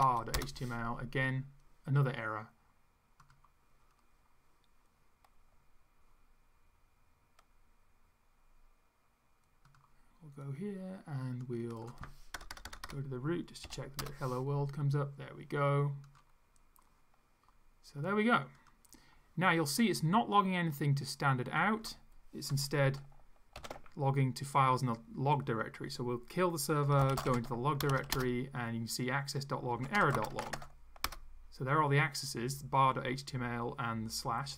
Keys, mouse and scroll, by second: 0.0-0.4 typing, 3.2 click, 9.7 click, 11.4 click, 12.4 BackSpace, 13.7 0, 14.0 Return, 16.1 click, 18.6 click, 23.6 ctrl+c, 26.6-31.0 typing, 31.1 Return.